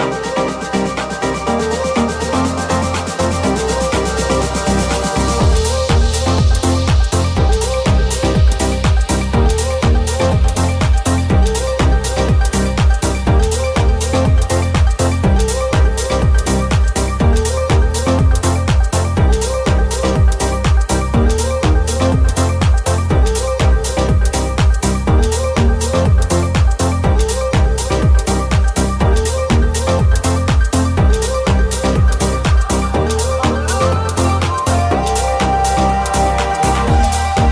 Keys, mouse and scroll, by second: 4.5 Tab, 5.9 alt+z, 6.2 click, 6.3 middle click, 6.7 shift+click, 6.8-21.4 alt+shift+middle drag, 7.5 alt+z, 8.1 g, 13.8 right click, 14.7 shift+right click, 17.0 s, 17.6 g, 21.4 right click, 21.5-26.0 shift+middle drag, 26.0 right click, 26.0-33.6 middle drag, 26.6 g, 29.5 Tab, 32.2 Tab, 33.0 alt+z, 33.6-35.4 alt+drag, 33.7 alt+z, 34.0 g, 35.4 alt+middle click, 35.6 alt+right click, 35.6-37.5 alt+middle drag, 37.4 alt+z.